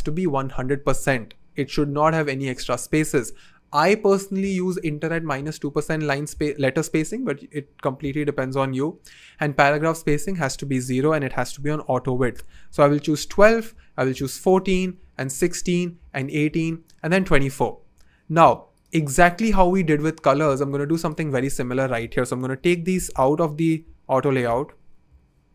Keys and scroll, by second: 22.5 Return, 25.0 BackSpace.